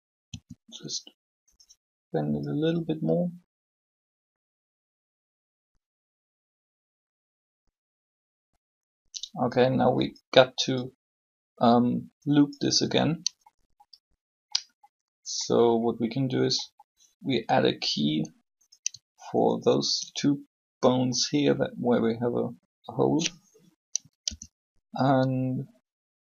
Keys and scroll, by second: 0.3 r, 23.9 i.